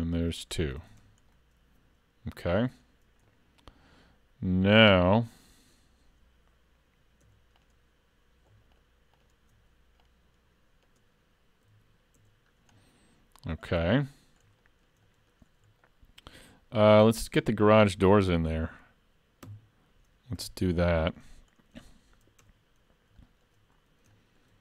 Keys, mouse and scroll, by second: 0.8 alt+a, 1.0 Tab, 1.3 middle click, 2.9-3.8 scroll up 2, 3.3 middle click, 7.2 Tab, 7.6 click, 8.8 shift+click, 10.1 click, 11.7 alt+a, 12.5 Tab, 12.5-13.1 scroll down 3, 12.8 middle click, 13.6-14.5 scroll up 1, 14.7 shift+middle click, 15.1 middle click, 15.9 shift+middle click, 19.5 KP_3, 20.4 z, 21.5 scroll up 3, 21.9 shift+middle click, 22.5 Tab, 23.2 shift+middle click, 23.8-24.2 scroll up 2, 24.2 shift+middle click.